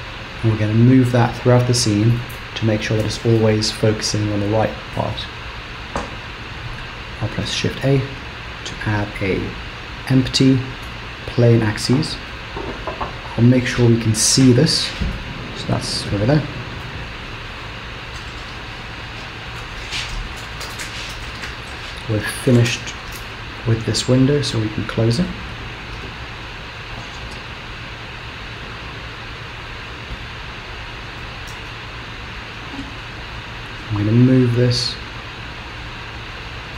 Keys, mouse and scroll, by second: 7.6 shift+a, 12.3 KP_3, 13.3-14.3 scroll down 1, 14.3 g, 16.8 KP_0, 17.5-18.2 scroll up 2, 18.2-18.8 scroll down 1, 23.3 right click, 25.6-26.5 scroll up 1, 27.5-28.8 scroll up 1, 28.8 g, 31.2 g, 33.4 g.